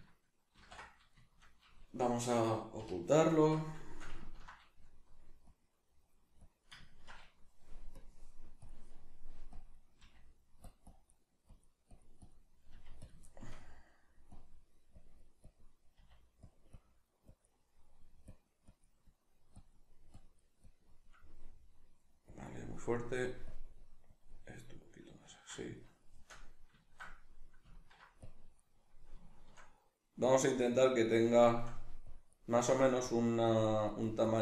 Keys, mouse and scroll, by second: 0.6 ctrl+i, 1.2-5.5 shift+middle drag, 2.8 h, 3.4 Tab, 5.5-6.8 drag, 6.8-8.0 ctrl+middle drag, 8.0-10.7 drag, 10.0 f, 12.7 click, 12.7 f, 13.3-14.3 shift+middle drag, 14.3-16.5 drag, 15.9 f, 17.7 middle click, 18.3-21.2 drag, 21.2-22.3 middle drag, 22.3 click, 22.8 middle click, 23.5-24.8 drag, 24.8-28.2 middle drag, 28.2-29.3 drag, 29.3 shift+middle click, 30.2-31.3 drag, 31.3 shift+middle click, 32.1-34.4 drag.